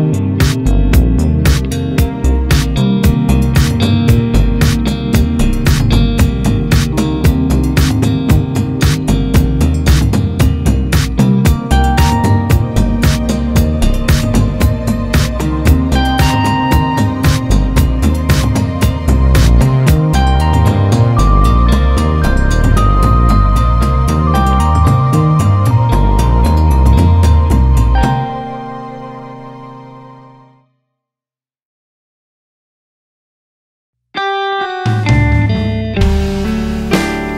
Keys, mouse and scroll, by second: 1.7 `, 2.5 KP_0, 3.3 s, 5.5-8.3 drag, 9.2 s, 12.9-14.4 drag, 17.1 KP_Divide, 17.4 scroll up 1, 17.6 scroll down 1, 17.9 Tab, 18.3-20.0 scroll down 1, 21.9 click, 22.1-22.9 scroll up 1, 22.9 click, 23.7 click, 25.3-26.9 drag, 29.0 click, 37.0-37.3 drag.